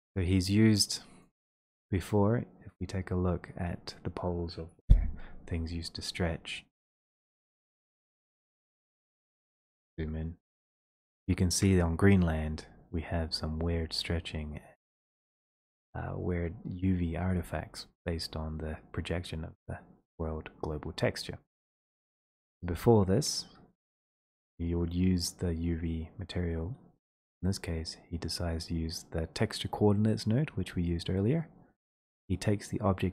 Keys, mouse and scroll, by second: 1.9-4.3 drag, 5.2-6.3 drag, 7.7 right click, 8.5 click, 9.2 click, 10.0-10.7 ctrl+scroll, 16.1-16.9 ctrl+scroll, 21.2 scroll, 22.2 scroll, 23.2 middle click, 24.0 middle click, 24.1 middle click, 27.1 middle click, 27.2 middle click, 27.3 middle click, 27.9 middle click, 28.0 middle click, 29.2-29.5 scroll.